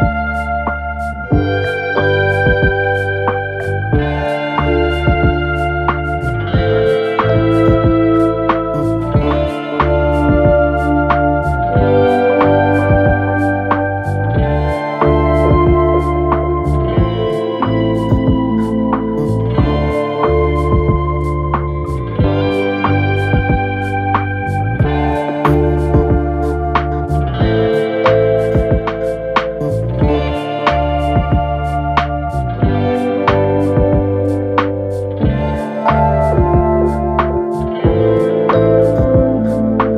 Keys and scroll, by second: 1.6 3, 2.1 ], 3.0 4, 3.7 3, 6.1 4, 8.1 3, 9.4 3, 9.7 4, 14.6 9, 14.7 Return, 15.4 ctrl+z, 15.9 9, 16.0 Return, 18.4 3, 19.7 4, 23.2 2, 31.7 4, 35.2 ctrl+d, 35.4 Escape, 37.6 3.